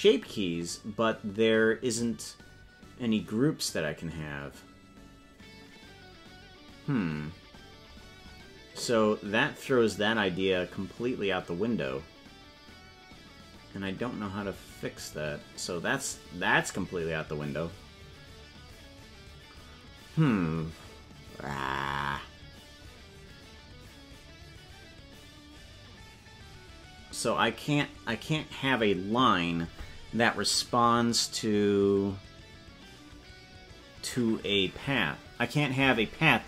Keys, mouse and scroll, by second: 0.2 scroll down 10, 1.9 scroll up 3, 13.0 scroll up 19, 25.8 scroll up 5.